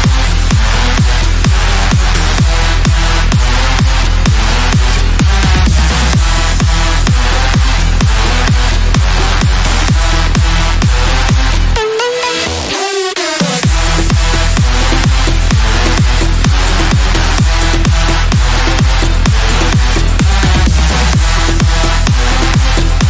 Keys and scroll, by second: 8.9 Delete, 9.2 ctrl+z, 15.4 KP_Add.